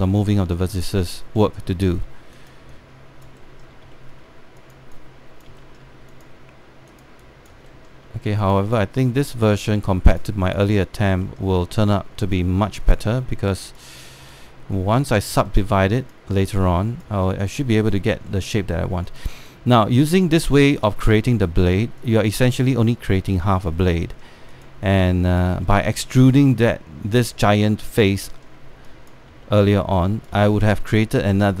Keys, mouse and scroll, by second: 1.6 alt+middle click, 2.1 alt+middle click, 2.4 alt+middle click, 3.0 click, 4.6 alt+middle click, 5.3 click, 6.2 alt+middle click, 6.8 click, 8.3 alt+middle click, 9.1 click, 10.4 alt+middle click, 10.8 click, 11.9 alt+middle click, 12.9 click, 16.1 alt+middle click, 16.7-18.5 drag, 19.0 alt+middle click, 19.7-21.3 drag, 21.3 scroll down 1, 21.5 alt+middle click, 22.3 click, 24.7 alt+middle click, 25.2 click, 26.4 alt+middle click, 27.2 click, 28.9 alt+middle click, 29.6 click, 30.1 alt+middle click, 30.6 click, 31.2 alt+middle click.